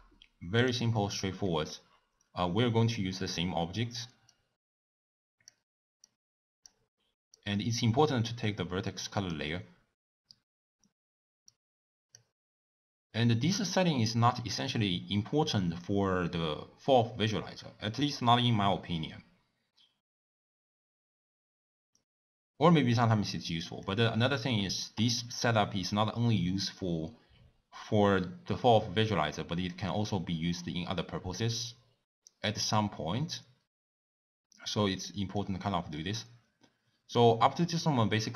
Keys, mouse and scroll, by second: 5.6 click, 11.6-32.8 drag.